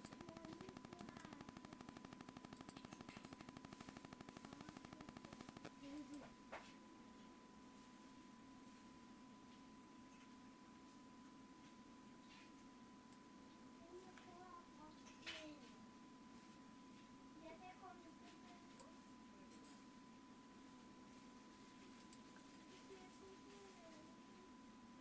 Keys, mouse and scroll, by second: 0.0-19.6 drag.